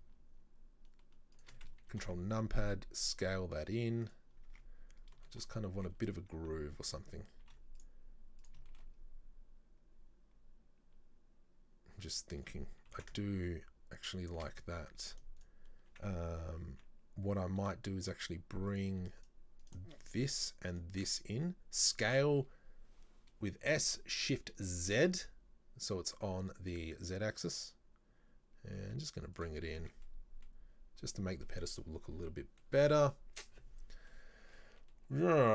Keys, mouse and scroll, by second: 2.0 ctrl+KP_Subtract, 2.7 s, 4.4 scroll down 2, 4.6 Tab, 5.3 shift+middle click, 5.6 scroll up 1, 5.8 Tab, 7.5 ctrl+r, 8.7-11.8 shift+middle drag, 13.0 ctrl+b, 14.9-15.5 scroll up 2, 15.5 alt+right click, 17.7 s, 19.3 alt+right click, 19.7 alt+right click, 20.8 alt+shift+right click, 21.9 s, 29.7 scroll down 2, 29.9 Tab, 30.1 middle click, 30.6-31.1 scroll down 2, 31.2 middle click, 32.0-32.4 scroll up 2, 32.4-32.7 middle drag, 32.7-33.7 scroll down 6, 33.7-34.2 scroll down 2, 34.2-35.5 middle drag.